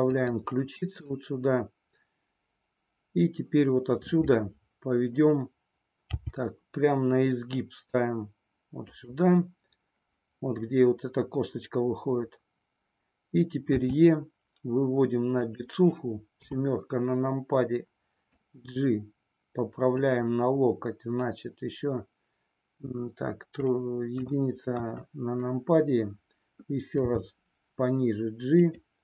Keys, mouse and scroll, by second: 0.8 click, 6.1 g, 8.9 click, 13.7 e, 16.4 KP_7, 18.4-20.1 drag, 24.2 KP_2, 24.8 KP_1, 27.1 g.